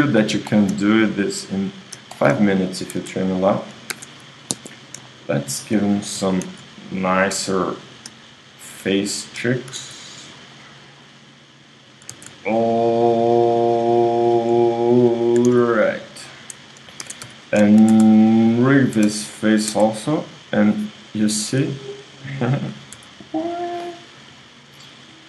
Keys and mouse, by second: 1.3-7.4 right drag, 3.1 Tab, 3.9 ctrl+Tab, 6.2 g, 7.9-11.1 drag, 10.2 s, 12.1 z, 13.8 ,, 14.2 ., 14.6 ,, 15.4 s, 17.1 ctrl+Tab, 18.6 space, 19.0 space, 19.7 Tab, 20.6 right click, 23.0 r, 24.7 right click.